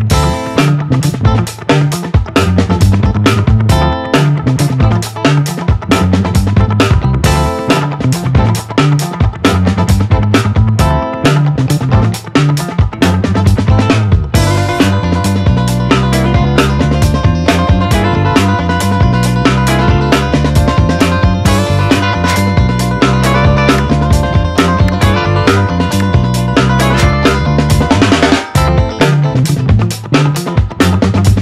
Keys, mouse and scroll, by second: 0.1 click, 0.6-2.1 typing, 3.9-15.6 drag, 15.6-22.5 drag, 27.9 Tab, 30.8 click.